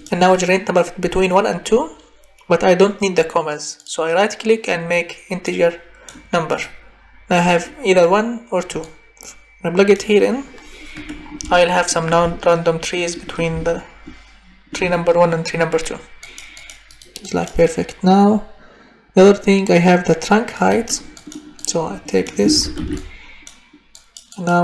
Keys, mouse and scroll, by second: 0.1 drag, 5.6 click, 6.7 click, 22.5 ctrl+c, 22.8 ctrl+v.